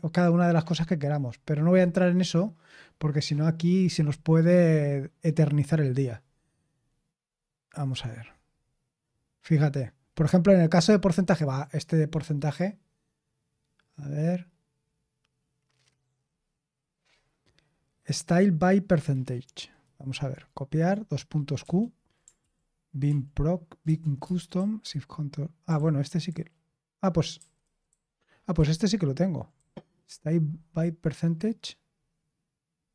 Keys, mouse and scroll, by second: 3.7-6.1 scroll down 1, 6.1-14.9 scroll down 1, 14.9-16.9 scroll up 1, 16.9-18.3 scroll up 1, 18.3-19.4 scroll up 1, 19.4-21.5 scroll up 1, 21.5 q, 22.3 ctrl+p, 23.0 ctrl+p, 23.8 Return, 24.5 shift+g, 25.7 ctrl+u, 26.2 ctrl+u, 27.3 ctrl+u, 27.6 ctrl+u, 27.8 ctrl+u, 28.5 ctrl+d, 29.5 j.